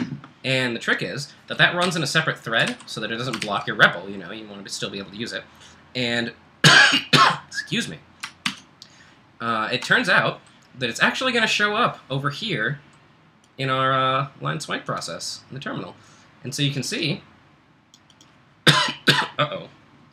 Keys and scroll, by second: 1.6-2.4 typing, 2.8 super+w, 3.4 ctrl+l, 8.5 super+Tab.